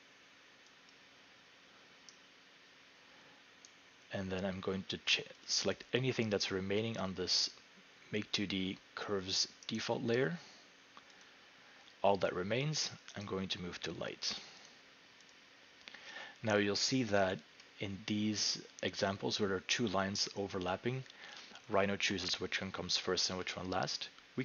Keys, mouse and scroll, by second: 0.9 click, 3.7 right click, 5.5 click, 9.8 right click, 11.2 click, 13.3 right click, 14.7 click, 15.3 click.